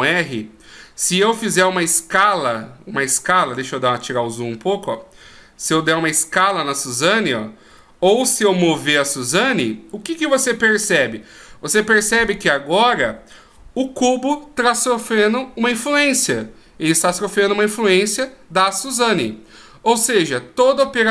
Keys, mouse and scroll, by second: 1.7 s, 4.3-4.9 scroll down 1, 5.5 s, 9.1 g, 12.0 scroll up 1.